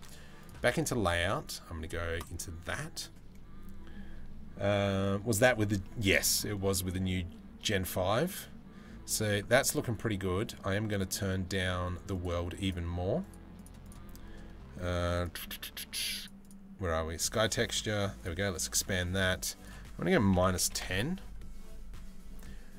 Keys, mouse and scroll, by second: 0.0-3.5 drag, 5.4 middle click, 7.2 middle click, 11.8 click, 12.3 click, 12.9 click, 13.5 click, 15.6 click, 15.8 click, 16.1 click, 17.8 click, 19.2-20.5 drag.